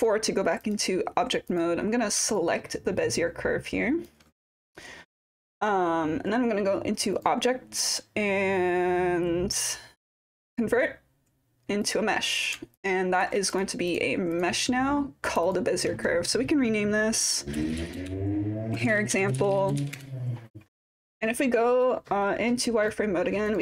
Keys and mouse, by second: 1.5 click, 2.4-4.1 alt+drag, 7.3-11.9 drag, 12.7-13.2 alt+drag, 14.3 click, 15.5-20.5 drag, 21.8-22.9 drag, 23.5 click.